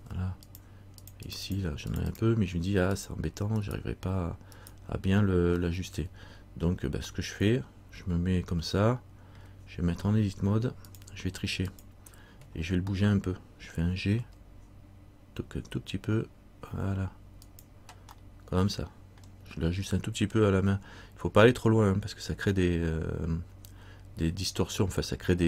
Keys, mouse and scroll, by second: 3.8 right click, 5.8 middle click, 7.3 middle click, 11.0 click, 14.3 g, 19.1 middle click.